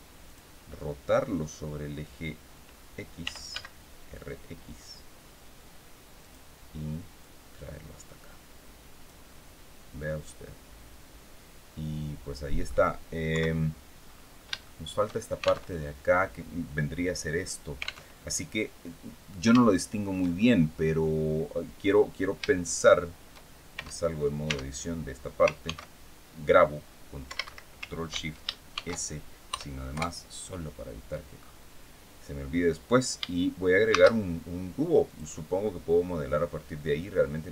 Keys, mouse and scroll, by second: 2.9 r, 3.2 x, 5.9 click, 6.9-8.9 drag, 9.1-9.4 scroll down 1, 9.7-12.5 middle drag, 13.0 KP_3, 13.7-14.2 scroll up 1, 14.3 shift+middle click, 15.3 alt+Tab, 17.8 alt+Tab, 18.8-19.1 scroll down 2, 19.3 shift+middle click, 20.0-20.4 shift+scroll down 3, 24.2 Tab, 24.8 scroll up 2, 25.3 ctrl+s, 27.0 Escape, 28.4 ctrl+shift+s, 29.2 KP_Add, 29.6 KP_Enter, 31.1 scroll up 2, 33.6 shift+a, 34.8 click, 35.9 scroll down 2, 37.3-37.5 drag.